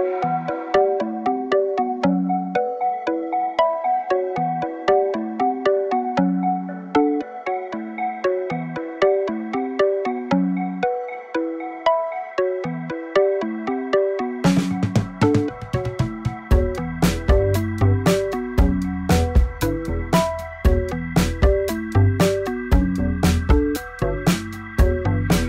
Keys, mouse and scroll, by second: 23.7 click, 23.9-24.8 scroll down 2, 24.8 shift+click.